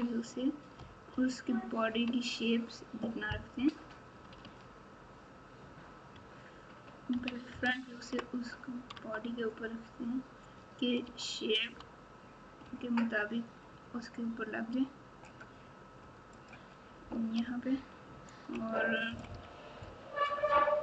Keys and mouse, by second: 1.1 ctrl+KP_4, 1.6 ctrl+KP_4, 3.5 KP_6, 4.4 alt+z, 6.1 KP_3, 7.1 KP_1, 7.5 KP_Add, 8.0 KP_Add, 8.1 KP_Add, 8.9 Tab, 11.0 g, 17.7 ctrl+KP_6, 18.2 ctrl+KP_6, 19.0 KP_Subtract, 19.2 KP_Subtract.